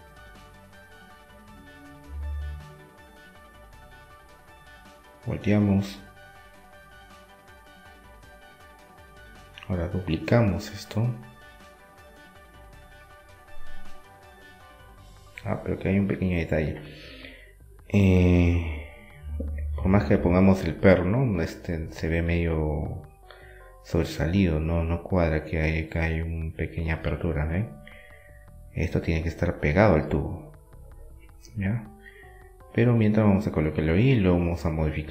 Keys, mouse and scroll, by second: 3.5-5.3 right drag, 4.5-6.2 drag, 6.7-8.2 middle drag, 9.9-11.2 right drag, 11.2-12.2 middle drag, 13.9-15.6 drag, 15.6-17.7 middle drag, 22.6-23.7 middle drag, 23.7-25.7 drag, 27.0 middle click, 27.0 shift+d, 27.6 middle click, 28.2-30.0 drag, 30.0 middle click, 30.5-32.2 drag, 32.2 KP_1, 33.6 KP_3.